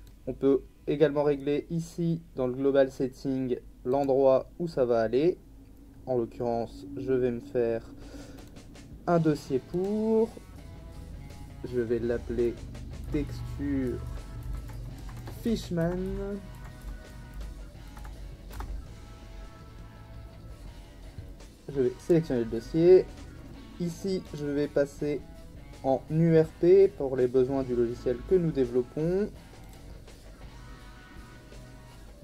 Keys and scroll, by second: 12.8-18.5 typing.